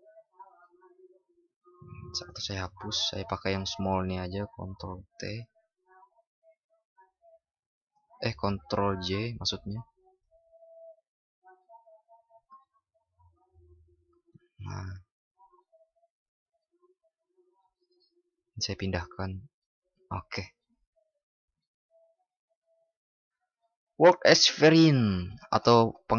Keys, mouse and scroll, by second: 9.1 ctrl+shift+i.